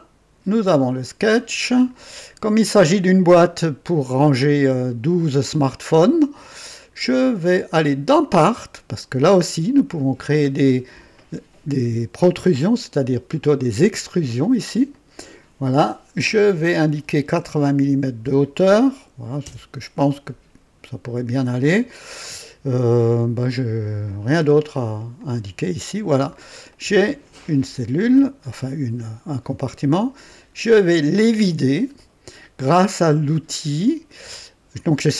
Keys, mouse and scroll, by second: 1.5 click, 3.4-4.1 right drag, 6.4 click, 8.3 click, 9.9 scroll down 1, 10.2 typing, 10.6-11.5 right drag, 14.9 click, 17.8 typing, 19.4 KP_0, 21.3-24.6 drag, 25.2 click, 26.1-26.5 scroll down 1, 26.7-27.6 right drag, 29.9 click.